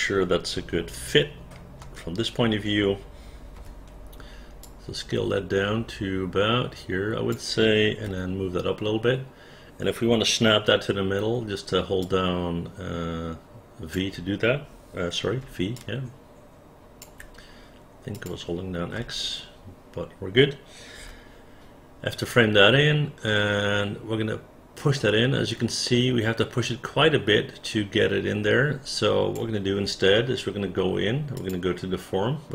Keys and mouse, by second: 1.8 space, 3.6 r, 4.6-7.3 drag, 8.1 w, 11.4 x, 12.0-14.0 drag, 15.4 v, 15.8-17.0 drag, 18.2 click, 19.0 space, 21.0 f, 22.3-29.3 drag.